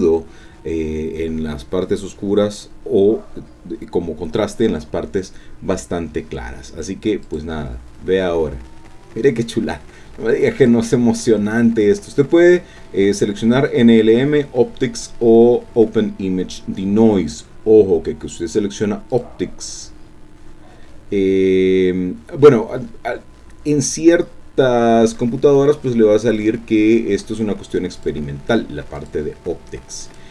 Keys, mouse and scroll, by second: 7.2 click, 10.6 click, 19.1 click, 24.7-25.1 scroll down 2, 25.2-25.7 scroll up 2, 27.9 click, 29.0 click, 30.1 click.